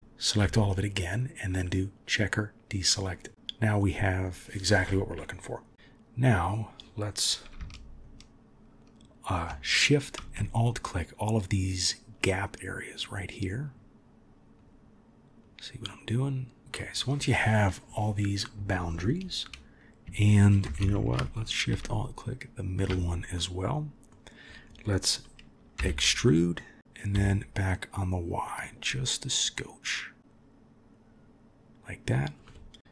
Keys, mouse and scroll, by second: 1.2-3.3 drag, 23.3-25.8 middle drag, 25.8 e, 32.8 ctrl+2.